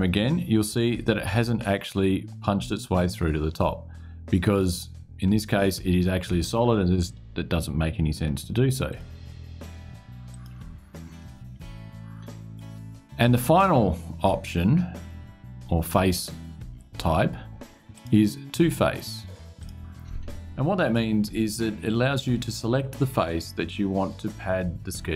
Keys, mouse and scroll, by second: 0.4-1.9 drag, 8.6 click, 10.0 click, 10.9 click, 17.6 click, 19.3 click.